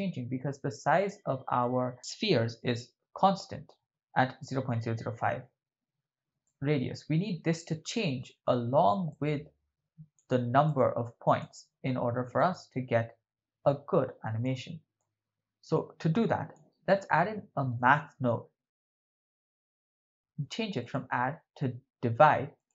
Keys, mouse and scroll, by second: 0.5 middle click, 1.6-2.6 middle drag, 3.3 middle click, 6.4-8.2 ctrl+middle drag, 9.5-10.3 drag, 10.7-11.4 drag, 12.4 click, 12.7-14.4 drag, 15.0-16.5 drag, 16.9 ctrl+middle click, 17.9 shift+middle click, 18.7 shift+a, 20.2 click, 20.8-22.7 drag.